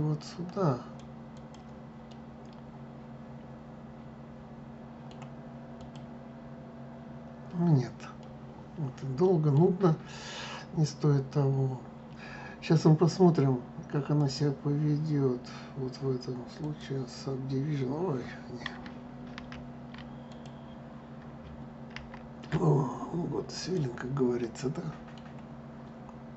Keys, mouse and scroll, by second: 1.8-4.8 middle drag, 5.5 click, 7.9-10.9 middle drag, 13.8-16.9 drag, 19.1 ctrl+z, 20.0 click, 21.6 ctrl+z, 23.2 click, 24.2 middle click.